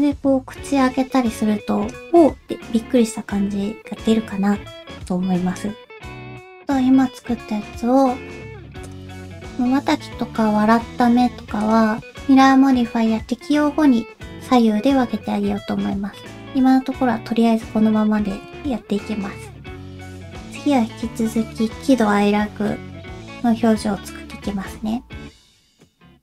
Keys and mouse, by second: 3.9 middle click, 5.1 click, 8.8 click, 10.3 Down, 11.6 click, 16.2 middle click, 18.3 ctrl+s.